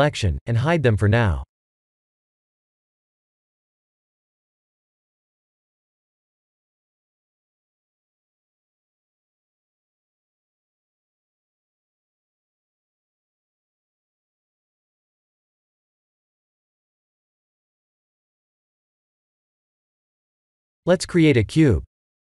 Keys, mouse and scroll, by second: 3.1 ctrl+space, 6.0 click, 7.2 click, 9.7 click, 10.4 click, 11.6 click, 12.8 shift+click, 14.5 m, 18.3 click, 19.5 click, 20.6 click, 21.2 KP_1, 22.1 click.